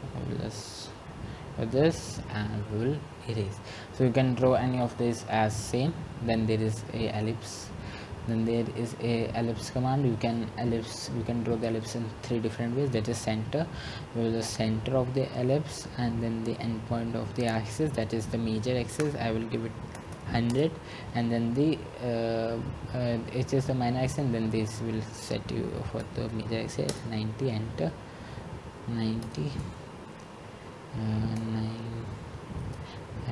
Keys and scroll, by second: 20.6-21.4 typing, 26.3 Return, 26.9-27.7 typing, 29.5 Return, 32.9-33.3 typing.